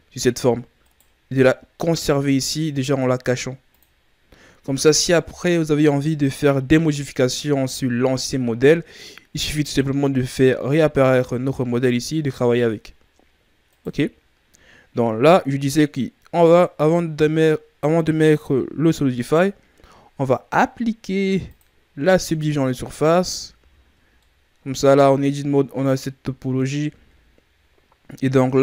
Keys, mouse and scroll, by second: 1.7-3.6 scroll down 8, 3.6 click, 4.8 right click, 13.6 right click, 16.3 click, 21.4 click, 23.0 Tab, 23.5 a, 23.8 scroll down 1, 24.1-26.7 middle drag, 26.7 Tab, 27.0-27.5 scroll up 1.